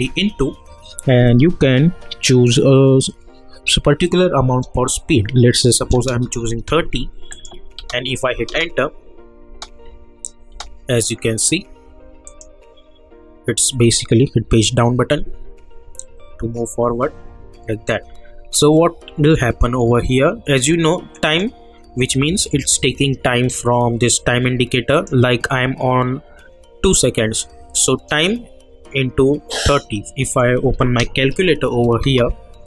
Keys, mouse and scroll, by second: 7.3 click, 7.8 space, 12.2 click, 14.4 Page_Down, 21.2 click, 24.9 click, 30.3 click, 30.5-31.6 typing, 32.0 Return.